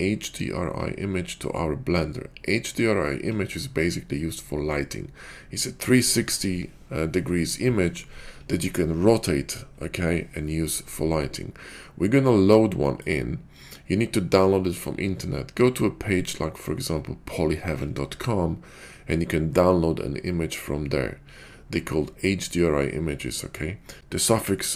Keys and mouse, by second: 12.8 click.